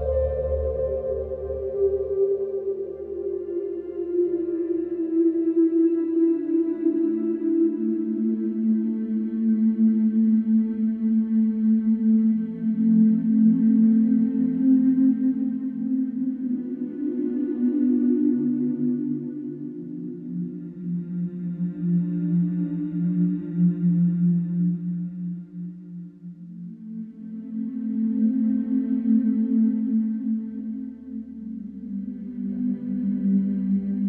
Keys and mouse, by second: 0.3 middle drag, 1.6 click, 2.4 shift+middle drag, 9.1 shift+middle click, 12.8 middle click, 15.2-21.1 middle drag, 21.7 KP_7, 22.2 alt+z, 22.6 alt+z, 23.3-25.5 middle drag, 26.0-28.0 middle drag, 29.1 middle click, 33.1-34.0 shift+drag.